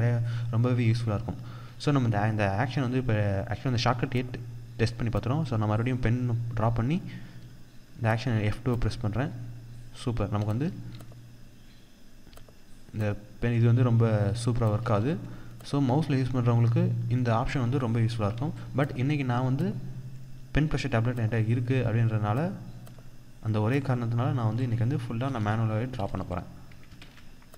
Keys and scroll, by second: 6.9 F2, 10.4 F2, 24.7 ctrl+a, 26.4 ctrl+d.